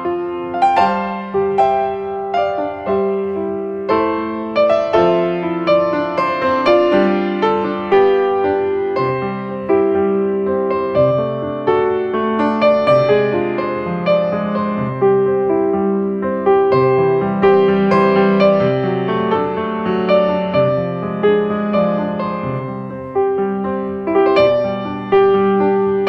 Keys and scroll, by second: 0.9 ctrl+space, 1.9 space, 3.0 space, 11.1 space, 11.6 space, 16.2 ctrl+space.